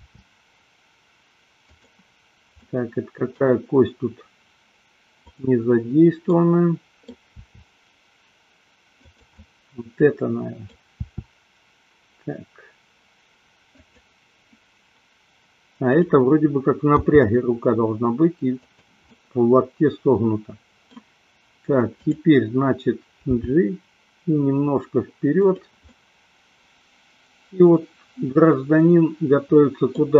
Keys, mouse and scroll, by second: 0.0 r, 1.9 click, 2.6-3.5 middle drag, 5.1 click, 6.2 middle click, 7.4 r, 9.4-10.7 middle drag, 11.0 r, 13.9 click, 15.9 click, 17.0 g, 19.1-20.9 middle drag, 22.0 click, 23.5 g, 25.9-30.0 middle drag.